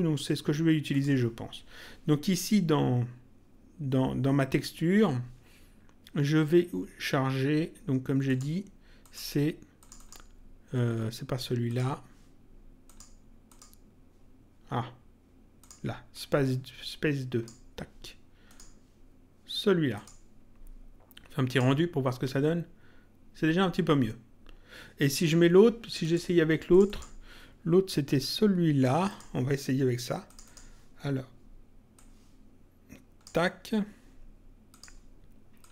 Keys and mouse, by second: 0.8 click, 8.2 click, 11.6 click, 12.8 click, 15.6 click, 18.4 click, 19.9 click, 21.4 click, 26.0 click, 29.0 click, 30.2 click, 31.9 click, 34.6 click.